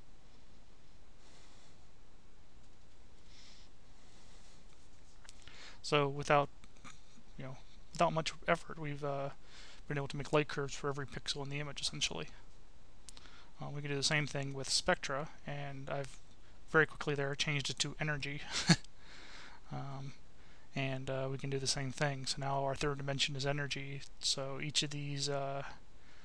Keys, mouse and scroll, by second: 2.0 click, 3.4 click, 8.0 click, 9.0 click, 9.8 Delete, 12.5-13.5 drag, 13.9 click, 14.6 click, 17.4 click, 18.4 click, 20.2-21.5 drag, 23.1 click, 25.2 click.